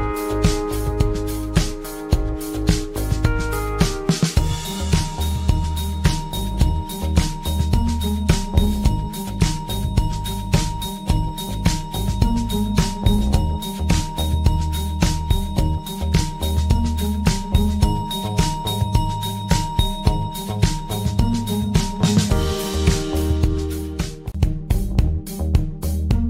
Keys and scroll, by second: 0.9 ctrl+z, 13.7 space.